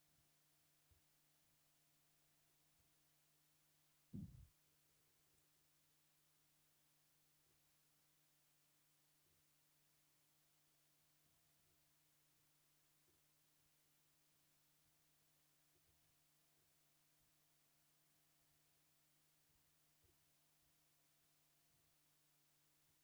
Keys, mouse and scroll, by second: 0.1 click, 0.6 middle click, 0.9 g, 2.4 shift+middle click, 2.5 scroll down 1, 2.6 shift+middle click, 3.6 shift+middle click, 3.9 middle click, 4.7-5.5 ctrl+z, 5.7 ctrl+z, 5.8 middle click, 6.0-6.7 scroll up 2, 6.7 ctrl+click, 6.8 middle click, 7.5 g, 8.7 click, 9.3 g, 10.2 middle click, 10.6 click, 11.7 g, 12.4 scroll down 2, 12.5 middle click, 13.1 g, 13.9 shift+middle click, 14.3 scroll up 1, 14.4 shift+middle click, 14.8 click, 15.3 shift+middle click, 15.8 g, 16.6 g, 17.4 click, 18.6 scroll up 2, 18.7 shift+middle click, 19.1 click, 19.5 scroll down 2, 19.6 shift+middle click, 20.0 g, 20.9 scroll down 1, 21.0 shift+middle click, 21.3 shift+middle click, 21.5 shift+middle click, 21.8-22.3 scroll down 3, 21.9 shift+middle click, 22.3 middle click.